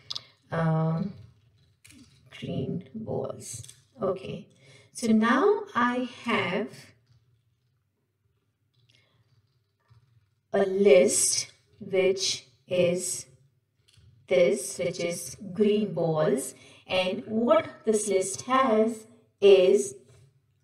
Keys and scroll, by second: 14.1 ctrl+shift+Right.